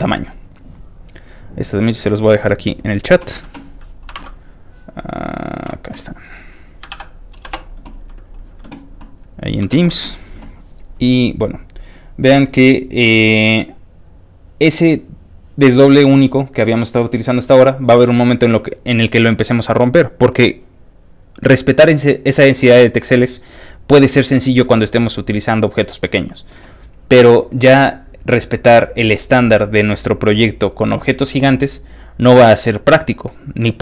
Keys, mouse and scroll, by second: 0.4 click, 1.2 click, 2.1 click, 2.7 click, 4.1 alt+Tab, 5.4 alt+click, 6.7 alt+click, 6.9 ctrl+v, 7.4 Return, 8.2 click, 9.4 click, 9.8 ctrl+w, 12.0-12.5 scroll up 2, 12.5-15.7 scroll up 1, 15.7 middle click, 15.8 scroll down 2, 18.9 scroll up 2, 27.8 middle click, 28.2-28.6 scroll down 2, 28.6-30.9 scroll up 2, 32.0 scroll down 2, 32.4-33.8 scroll up 2.